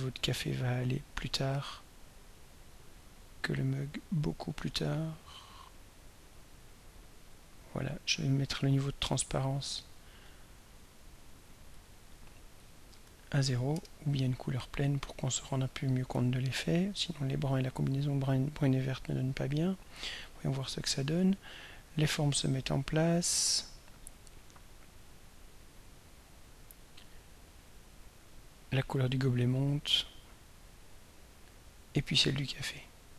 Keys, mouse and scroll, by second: 1.1 click, 2.6-4.6 drag, 5.1-6.7 drag, 8.7 click, 9.8 click, 11.4 click, 12.7 click, 13.0 1, 13.7 Return, 16.3 ctrl+scroll down 2, 17.0 ctrl+scroll up 3, 19.7 click, 21.2-33.1 drag.